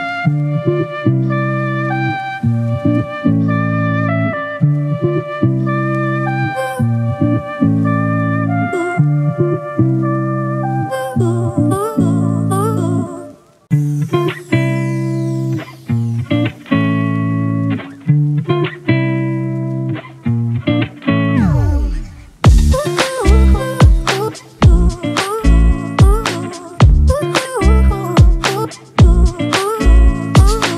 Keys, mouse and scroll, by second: 3.0 ctrl+z, 7.0 ctrl+t, 8.2 ctrl+click, 10.3 Return, 10.3 ctrl+click, 15.4-16.0 alt+scroll down 1, 22.7 ctrl+click, 24.1 right click.